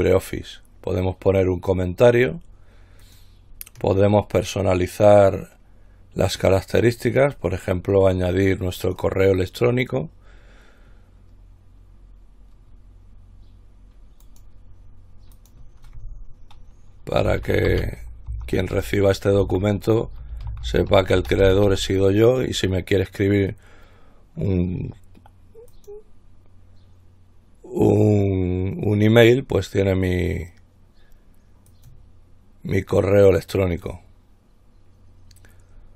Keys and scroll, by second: 17.5-21.9 typing.